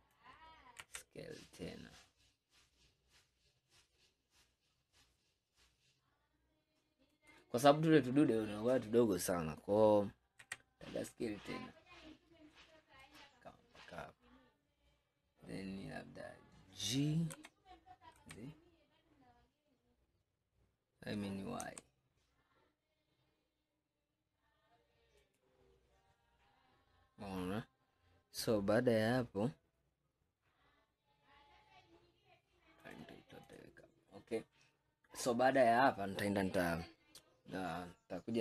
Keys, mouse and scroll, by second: 0.9 s, 7.7-10.5 scroll up 5, 10.5 s, 14.3 scroll up 1, 17.4 g, 25.8-27.8 scroll down 2, 26.1-29.0 middle drag, 27.8-29.0 scroll down 1, 32.9 click, 33.5 click, 34.4-34.9 scroll down 2, 34.9-35.4 scroll up 2, 35.4-37.3 scroll down 2.